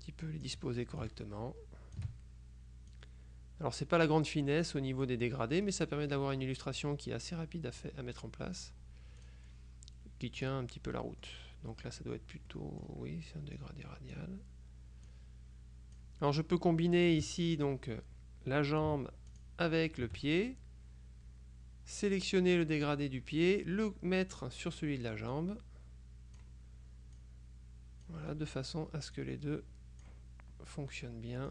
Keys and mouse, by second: 1.1-2.5 ctrl+shift+drag, 3.0-5.2 drag, 5.7-7.4 drag, 7.9-9.2 drag, 9.3 click, 10.5 click, 11.1 middle click, 12.6 middle click, 13.7-14.7 drag, 15.2-16.6 drag, 19.4 shift+click, 22.9-25.0 drag, 25.4-27.0 drag, 27.3-28.7 drag, 29.3-30.6 drag.